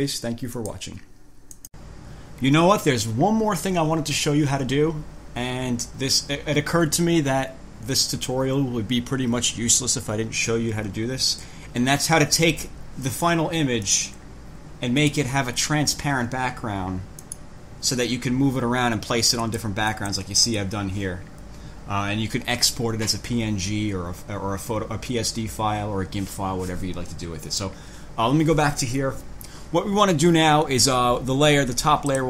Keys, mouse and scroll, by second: 0.8 click, 1.7 click, 14.1 click, 15.2 click, 17.4 click, 19.6 click, 20.2 click, 27.6 click.